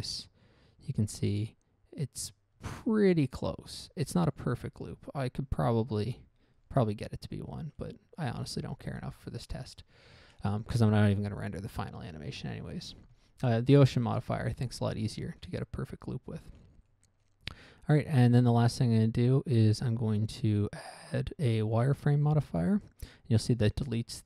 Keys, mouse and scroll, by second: 6.5 Escape, 6.9-7.4 scroll up 1, 7.4 scroll down 1, 7.9 shift+middle click, 15.8 right click, 16.9 scroll down 1, 17.2 middle click, 18.1 middle click, 18.8 click, 20.1 click, 22.1 click, 23.0-23.5 scroll up 1, 23.5 scroll down 1.